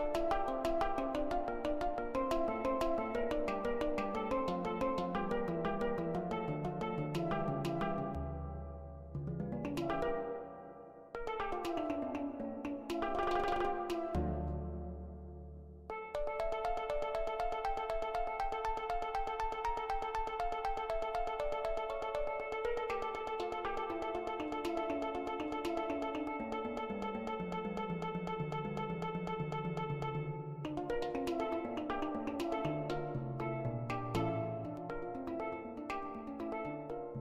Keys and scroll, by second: 11.4-12.2 typing, 16.3 4, 17.7 F4, 22.3 BackSpace, 22.4 Return, 23.3 1, 23.4 Return, 27.4 BackSpace, 33.3 ctrl+z.